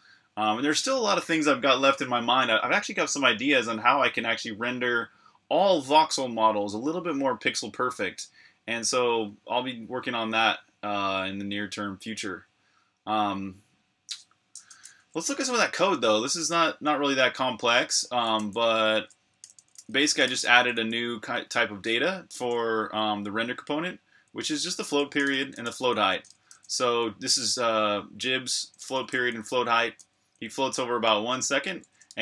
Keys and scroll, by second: 14.8-16.1 typing, 18.3 super+j, 19.2-21.2 typing, 22.8 Escape, 23.9-27.3 typing, 28.8-30.2 typing, 31.5-32.2 typing.